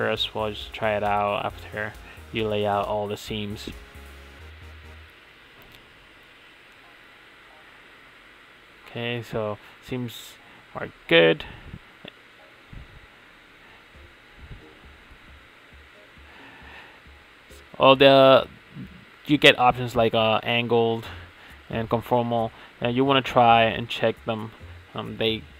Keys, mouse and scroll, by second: 6.7 middle drag, 15.6-16.3 drag, 17.7 middle click, 18.4 middle click, 18.7 middle click, 18.9 middle click, 19.2 middle click, 20.3 click, 20.9 click, 21.5 click, 21.9 middle click, 22.1 middle click, 22.4 middle click, 22.6 middle click, 23.4 middle click, 23.9 middle click, 24.3 middle click, 24.6 click, 25.1 middle click, 25.4 middle click, 25.5 middle click.